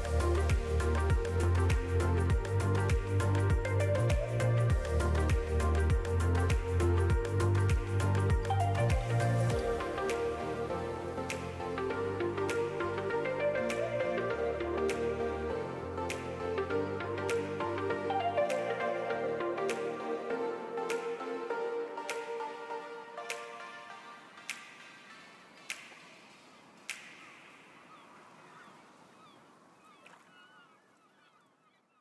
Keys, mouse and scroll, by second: 1.9 shift+middle click, 2.5 middle click, 3.4 l, 5.2 middle click, 5.7 l, 6.0 middle click, 7.0 click, 8.6 middle click, 9.2 alt+a, 9.9-11.8 l, 11.8 middle click, 12.8 click, 14.7 alt+a, 20.9 alt+a, 21.0 Tab, 21.5 alt+a, 21.7 middle click, 23.0 click, 23.6 Tab, 23.8-24.1 scroll up 1, 24.3 l, 25.0 s, 25.8 click, 26.5 middle click, 28.2 alt+a, 28.5 l, 28.9 s, 29.7 alt+a, 29.9 middle click, 30.4 scroll up 4, 30.6 middle click, 31.1 shift+middle click, 31.3 middle click, 31.9 shift+middle click.